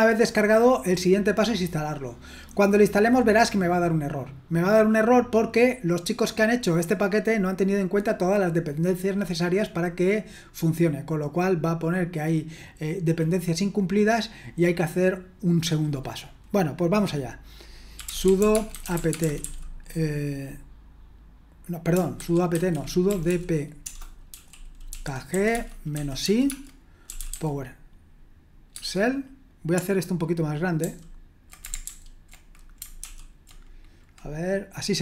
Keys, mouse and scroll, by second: 17.8-19.9 typing, 22.2 ctrl+w, 22.5 ctrl+w, 22.8-27.8 typing, 31.9 ctrl+*, 33.0 ctrl+l.